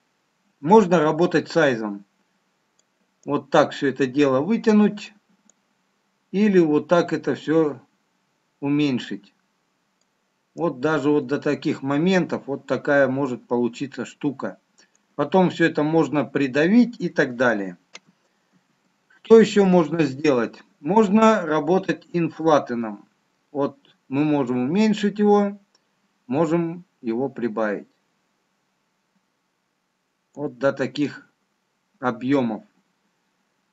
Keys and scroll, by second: 18.5 ctrl+z.